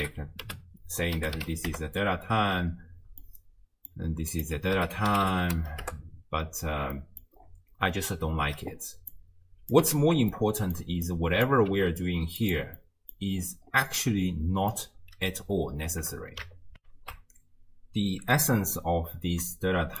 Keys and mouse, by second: 3.2 middle click, 4.3-5.9 drag, 7.0 click, 9.1-9.8 drag, 10.0 ctrl+x, 10.3 middle click, 11.3 click, 11.7 g, 12.8 click, 12.8 right click, 14.0 click, 14.0 right click, 16.8 ctrl+alt+shift+q, 19.8 d.